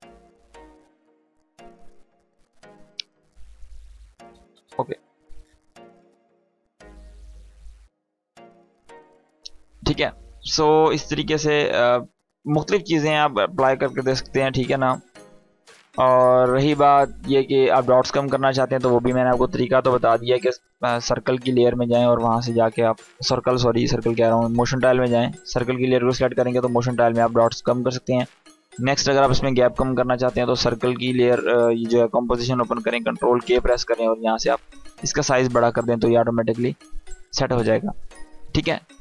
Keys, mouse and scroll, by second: 4.2 space, 23.8 space, 24.8 click, 30.0 click, 32.9 ctrl+k, 35.5 Escape, 36.5 click, 37.7-38.6 scroll up 1, 38.6-39.0 click.